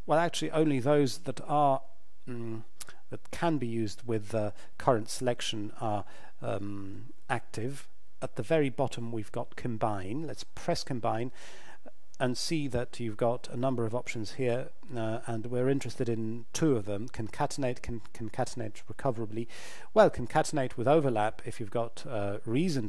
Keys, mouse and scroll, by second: 10.6 click.